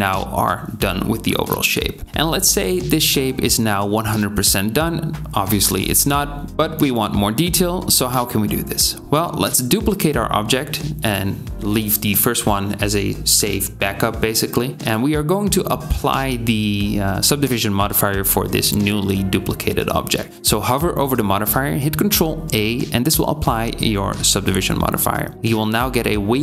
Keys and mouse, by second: 2.9-5.5 drag, 6.0 click, 10.0 shift+d, 22.5 ctrl+a, 23.3 Tab.